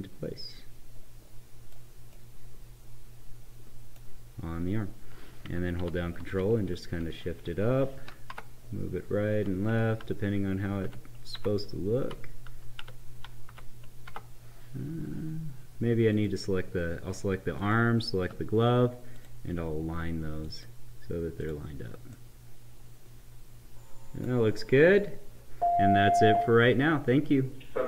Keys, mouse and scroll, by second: 2.4 right click, 5.7 ctrl+Up, 13.5 Down, 14.0 Left, 16.0 click, 17.5 shift+click, 22.1-26.6 right drag.